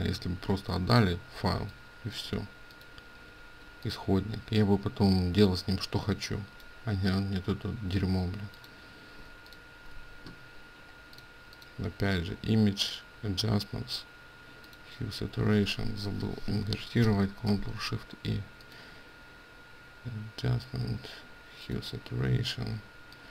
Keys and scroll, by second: 9.3 ctrl+space, 16.0 Escape, 17.0 ctrl+shift+i.